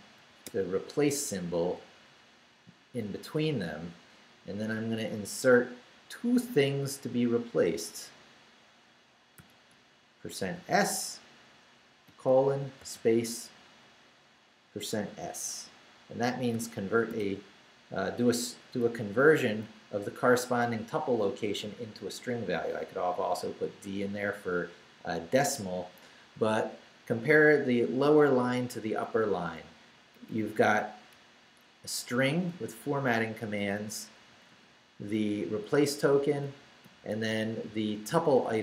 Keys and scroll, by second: 0.0-1.0 typing, 1.8 Left, 9.4 shift+5, 10.4 shift+s, 12.1 shift+;, 12.8 shift+space, 13.8 shift+space, 16.5 shift+5, 17.1 shift+s, 17.8 s, 19.6 Down, 29.3 Up, 31.1 Left, 32.5 Left, 35.9 Right.